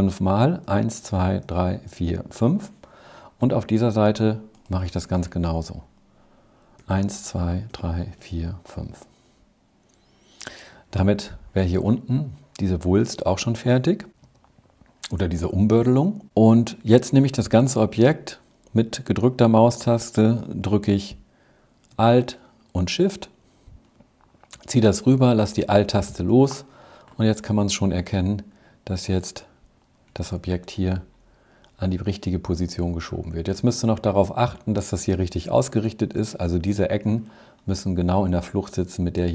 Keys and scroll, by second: 0.4 Left, 0.9 Left, 1.3 Left, 1.8 Left, 2.2 Left, 6.7 Right, 7.2 Right, 7.6 Right, 8.1 Right, 8.5 Right.